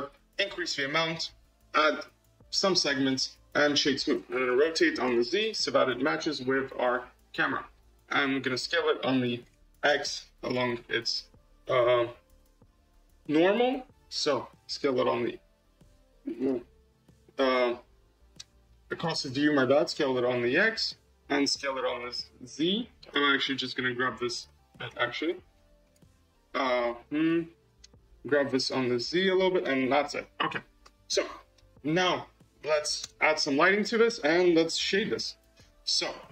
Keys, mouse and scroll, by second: 2.5-3.0 middle drag, 3.0-4.4 right drag, 4.4 r, 8.4 s, 10.3-14.6 drag, 14.6 s, 17.0-19.5 drag, 19.6 s, 21.4 s, 23.0 Tab, 23.4 click, 24.3 g, 26.7-28.2 drag, 28.2 g, 29.6 middle click, 30.0 scroll, 32.9 Tab, 33.9 click, 34.7 g.